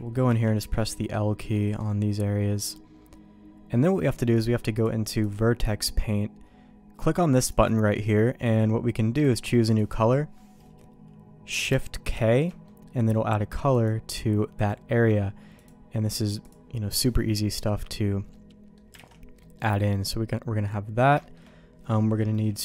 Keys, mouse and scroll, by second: 0.3 l, 1.5 middle click, 2.8-3.8 middle drag, 4.8 click, 7.0 click, 7.5 click, 12.1 shift+k, 12.6 middle click, 13.7 click, 14.6 click, 15.7 click, 16.9 middle click, 17.6 middle click, 18.3 middle click, 18.9 alt+a, 19.4 middle click, 21.2 shift+middle click, 22.2 middle click.